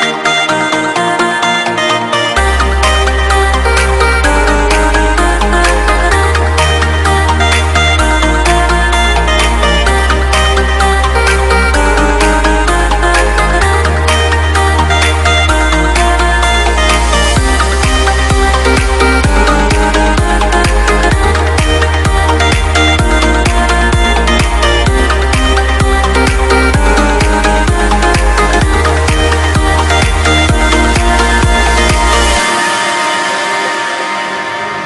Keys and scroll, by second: 20.6 alt+BackSpace.